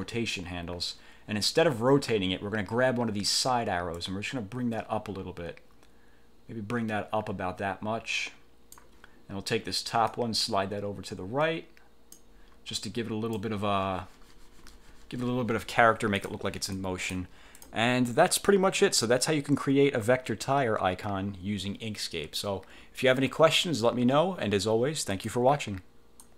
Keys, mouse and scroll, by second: 4.0-9.0 drag, 10.2 click, 12.9-13.6 drag, 16.2 click, 16.8 click, 17.6 click, 25.2 click, 26.3 click.